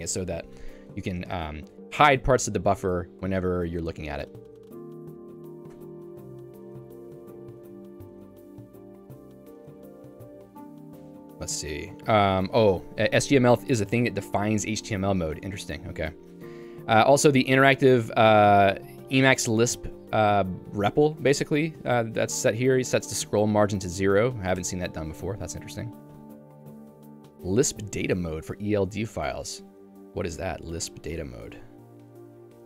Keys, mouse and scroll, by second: 3.3 q, 5.8 Return, 7.2 click, 8.0 Escape, 10.8 Escape, 11.3 j, 15.4 Escape, 16.0 j, 17.2 k, 17.7 shift+v, 18.3 Escape, 18.5 j, 19.6 k, 21.7-26.1 typing, 24.6 Escape, 28.1 k, 28.4 h, 29.1 h.